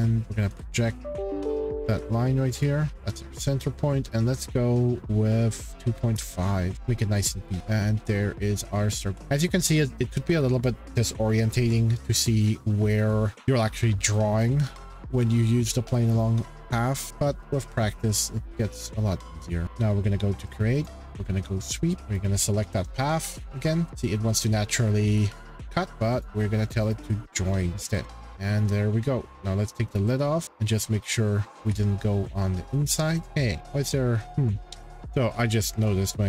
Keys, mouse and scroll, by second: 0.2 Escape, 0.5 p, 0.7 shift+scroll, 0.9 click, 1.6 click, 2.6 click, 2.9 c, 3.1 click, 5.5-6.5 typing, 6.7 scroll, 7.4 click, 9.2 shift+middle click, 9.3 shift+middle click, 9.4 middle click, 9.6 middle click, 9.8 scroll, 12.4-13.3 scroll, 13.3-14.1 scroll, 14.2-15.7 scroll, 15.7 scroll, 17.0-17.7 scroll, 17.7 scroll, 19.6 click, 20.9 click, 21.8 click, 22.0 click, 22.2 click, 23.4 scroll, 25.1-25.9 shift+middle click, 26.2 click, 26.9 click, 27.7 click, 27.9 middle click, 28.0 middle click, 28.0 middle click, 28.4 scroll, 29.9 click, 31.6 shift+middle click, 33.1 click, 33.2 click, 33.6 click, 33.6 middle click, 33.7-34.4 scroll, 34.2 ctrl+z, 34.6 click, 35.1-35.8 scroll.